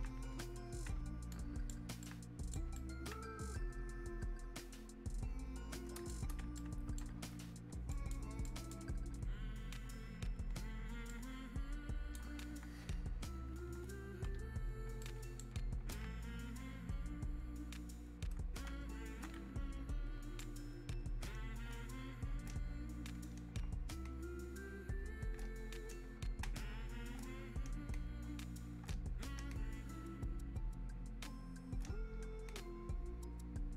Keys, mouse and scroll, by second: 1.3 right click, 2.0-7.9 alt+right drag, 7.9 ctrl+click, 11.1-15.0 ctrl+drag, 15.0-20.4 alt+right drag, 20.4-21.7 ctrl+drag, 21.7 ctrl+space.